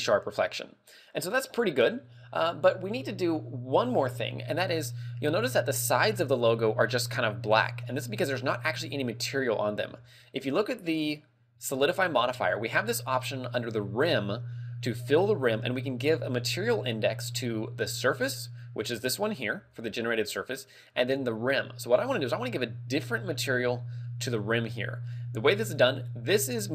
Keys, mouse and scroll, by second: 0.2 middle click, 5.4 middle click, 11.0 click, 25.7 click.